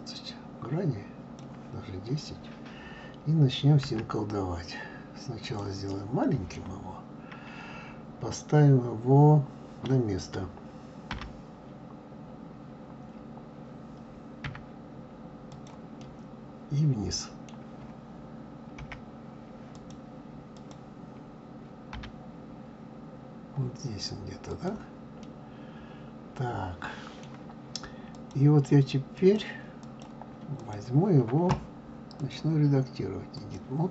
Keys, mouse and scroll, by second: 3.8 s, 5.9-8.8 middle drag, 11.1 g, 16.0-18.8 middle drag, 18.8 KP_1, 19.7 click, 20.5 click, 21.9 g, 25.2-28.1 middle drag, 28.1 click, 29.1 click, 29.8 click, 30.6 click, 32.2-33.9 drag.